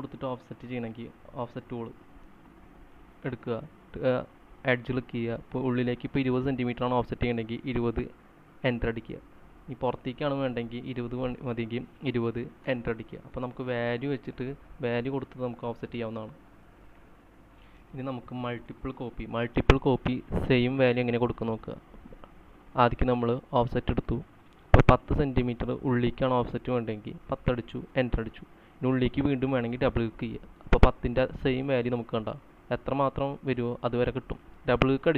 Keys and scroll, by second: 8.2 typing, 9.2 Return, 11.0 typing, 12.2-14.3 typing, 16.5-17.9 typing, 27.9-29.3 typing, 32.1-33.1 typing.